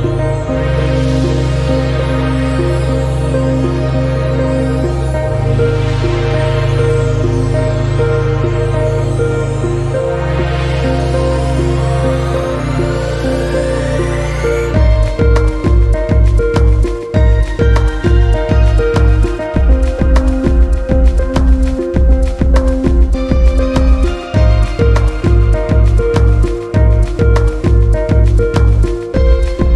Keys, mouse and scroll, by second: 0.0-0.4 scroll down 2, 0.4 shift+middle click, 0.7 scroll down 1, 0.9-2.8 middle drag, 3.1 KP_3, 3.4-4.0 scroll up 2, 4.0 scroll down 1, 4.2-4.6 shift+middle drag, 4.6 Tab, 5.2 click, 5.8 g, 9.6 click, 10.3 g, 11.3 click, 11.6 g, 12.1 middle click, 12.6 click, 12.8 g, 14.1 shift+middle click, 14.7 click, 15.3 g, 16.2 middle click, 16.7-17.3 scroll up 1, 17.3 click, 17.5 g, 18.7 click, 18.9 g, 20.6 KP_Decimal, 20.9-21.5 scroll down 15, 21.5 scroll up 2, 21.6-22.1 scroll down 11, 22.1-24.5 middle drag, 24.5-24.9 scroll up 1, 24.9 click, 25.6 middle click, 26.1 g, 27.0 click, 27.2 g, 28.0 middle click, 28.6 click, 28.9 g.